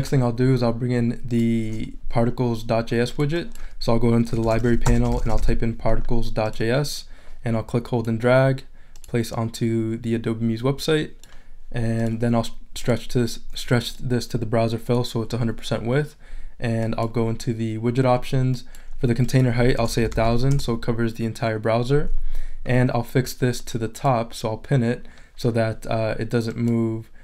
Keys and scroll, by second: 4.1-5.9 typing, 19.5-20.5 typing.